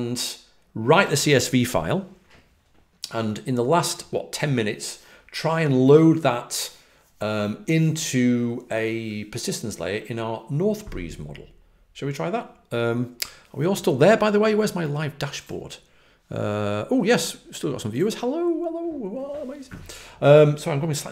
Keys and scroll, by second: 4.0 typing.